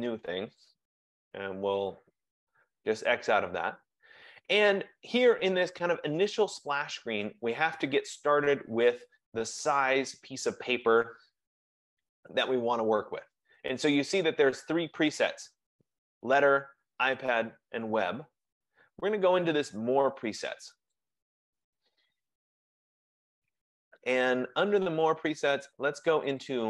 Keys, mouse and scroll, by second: 2.2 click, 21.1 click, 26.4 click.